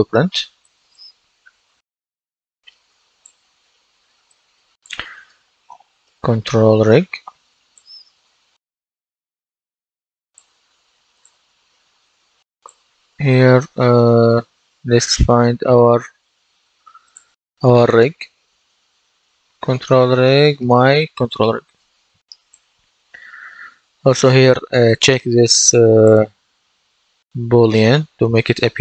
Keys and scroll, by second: 4.9-6.5 typing.